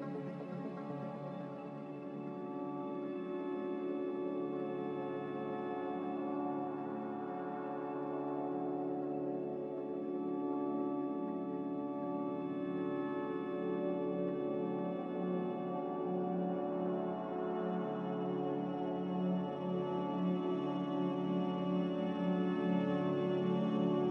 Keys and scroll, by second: 7.9 a, 13.1 x, 14.8 z, 16.9 x, 17.7 z, 19.9 x, 20.6 x, 22.4 z, 23.3 x.